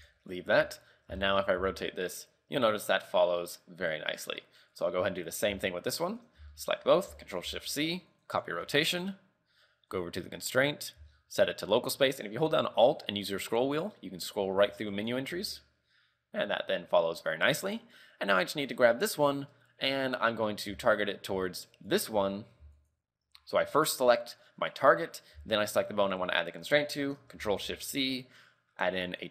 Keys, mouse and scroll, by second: 0.3 scroll up 3, 0.7 KP_3, 1.0 scroll down 2, 1.4 shift+middle click, 1.7 r, 4.9 right click, 5.3 right click, 6.2 shift+right click, 6.6 shift+middle click, 7.6 ctrl+shift+c, 10.0 click, 11.2 alt+scroll up 6, 13.6-15.1 alt+scroll up 7, 15.1 right click, 15.1 alt+scroll up 2, 15.4 r, 18.7 right click, 20.8 z, 21.9 shift+right click, 22.9 shift+right click, 23.9 right click, 25.8 shift+right click, 27.7 ctrl+shift+c.